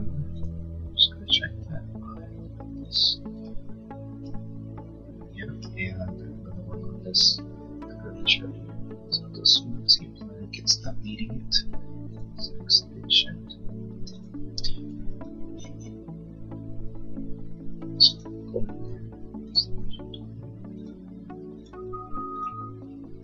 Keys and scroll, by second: 13.7 space.